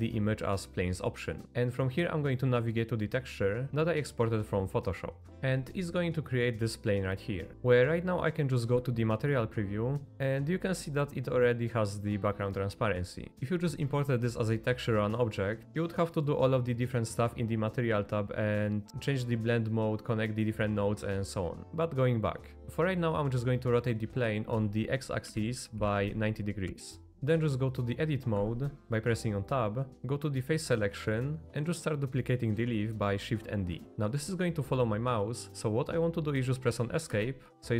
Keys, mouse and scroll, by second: 6.1-6.7 middle drag, 8.7 z, 10.1 middle click, 11.3 middle click, 21.6 r, 24.5 r, 28.4 Tab, 29.9 3, 31.1 middle click, 33.7 shift+d.